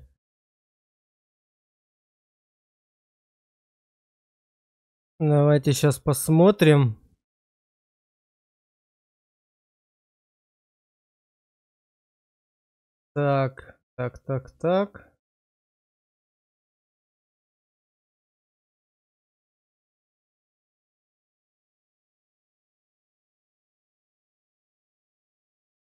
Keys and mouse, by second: 3.4 shift+middle click, 6.1 click, 10.3 shift+middle click, 11.2 shift+middle click, 15.3 middle click.